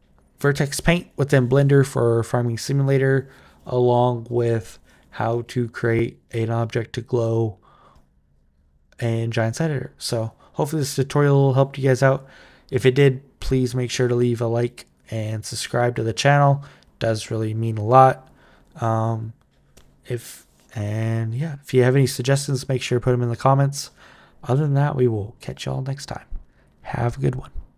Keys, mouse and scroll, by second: 27.7 click.